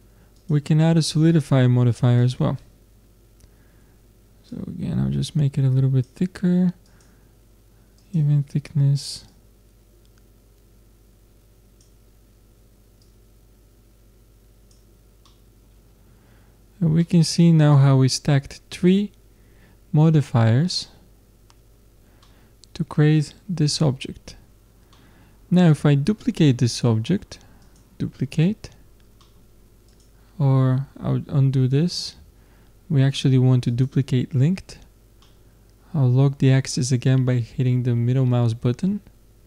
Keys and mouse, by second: 0.4-2.2 drag, 4.5-6.6 drag, 6.8-14.8 drag, 15.3 middle click, 17.9 middle click, 20.0-22.2 middle drag, 24.0 middle click, 26.7 middle click, 27.6 click, 28.2 middle click, 28.6 click, 32.0 ctrl+z, 33.7-35.6 drag.